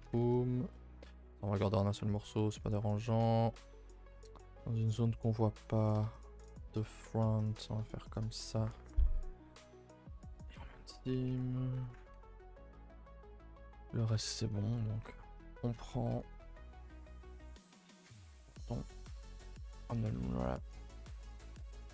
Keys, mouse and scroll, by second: 0.0 a, 0.2 a, 0.3-1.5 middle drag, 1.5 scroll down 2, 1.7-2.7 middle drag, 2.7 alt+Left, 3.1 middle click, 3.2 a, 3.4 a, 3.6-5.9 middle drag, 5.9 click, 6.2 shift+click, 6.5 shift+click, 6.8 middle click, 6.9-7.5 scroll up 2, 7.5 shift+click, 7.6 middle click, 8.2 shift+click, 9.8 right click, 10.6-11.3 scroll down 2, 11.3 a, 11.4 a, 12.4 middle click, 12.6-12.9 scroll down 4, 12.9-14.0 shift+middle drag, 14.0-16.1 typing, 14.3 middle click, 14.5-15.1 scroll down 1, 18.2 b, 18.5 n, 19.6 u, 21.6 Tab.